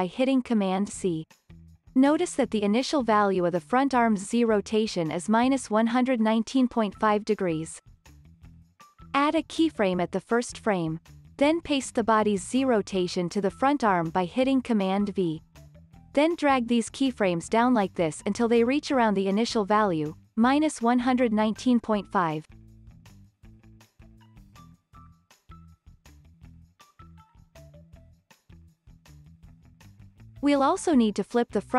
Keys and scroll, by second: 1.9 super+c, 15.2 super+v.